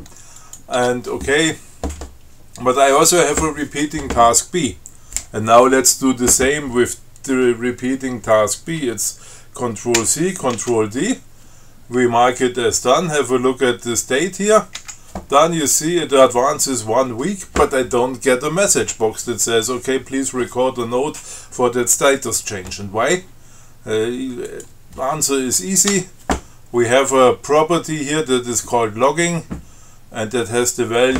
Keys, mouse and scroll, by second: 0.6 click, 1.0 Tab, 3.2 click, 10.2 ctrl+c, 10.8 ctrl+t, 15.0 d, 24.7 click, 26.2 Tab.